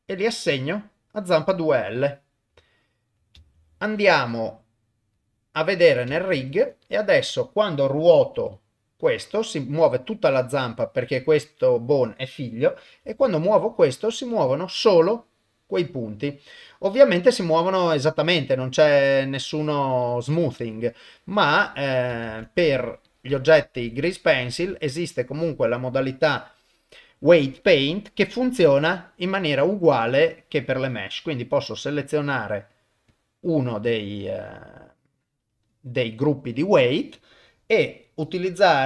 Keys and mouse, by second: 0.5 click, 3.6 ctrl+Tab, 5.9 click, 6.4 ctrl+Tab, 7.2 click, 8.4 r, 11.2 click, 13.0 r, 21.4 click, 22.3 ctrl+Tab, 23.1 click, 23.4 shift+middle click, 24.7 ctrl+Tab, 30.7 middle click, 32.0 click, 32.7 click, 33.1 click.